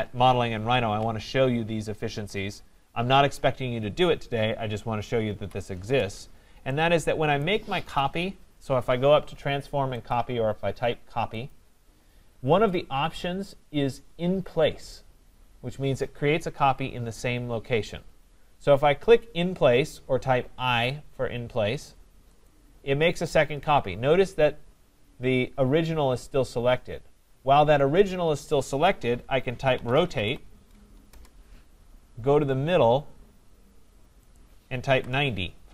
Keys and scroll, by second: 5.3 Delete, 31.1 Return.